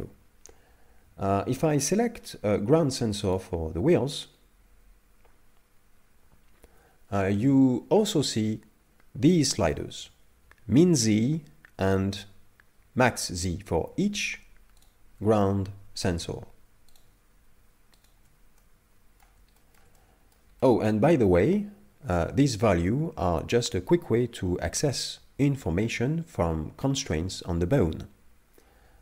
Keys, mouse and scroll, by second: 3.4 right click, 14.9 shift+right click, 15.4 middle click, 17.0 shift+right click, 18.1 shift+right click, 18.6 middle click, 19.6 shift+middle click, 19.9 middle click, 20.6 shift+middle click, 21.8 scroll down 2.